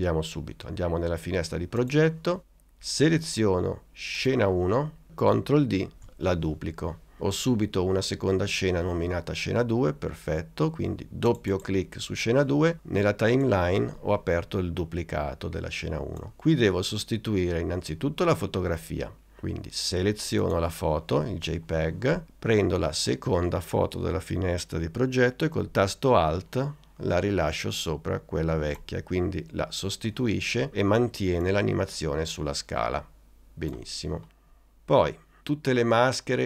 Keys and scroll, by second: 6.0 super+d.